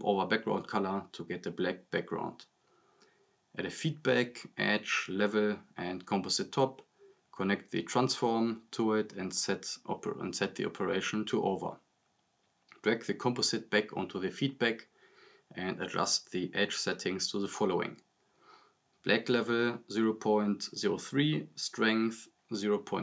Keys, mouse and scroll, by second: 1.7 click, 3.9 right click, 4.8 click, 4.9-9.9 typing, 5.3 click, 6.0 right click, 6.1 click, 6.7 click, 7.2 right click, 7.4 click, 8.2 click, 8.9 right click, 9.1 click, 9.8-10.9 drag, 15.2-16.0 drag, 20.7-21.1 click, 22.9-23.0 drag.